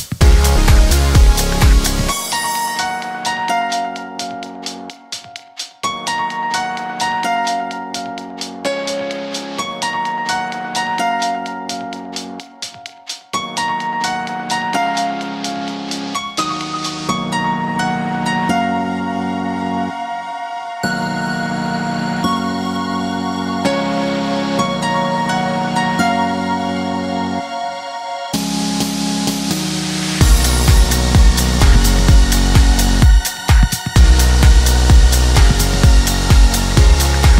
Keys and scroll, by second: 13.4 ctrl+v, 30.4 Escape.